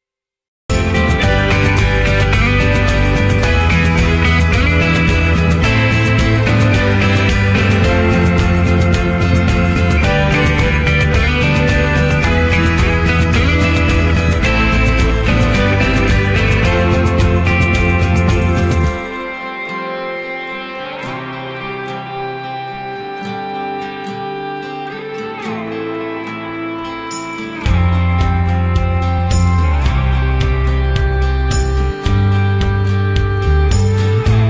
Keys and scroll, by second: 3.8 ctrl+0.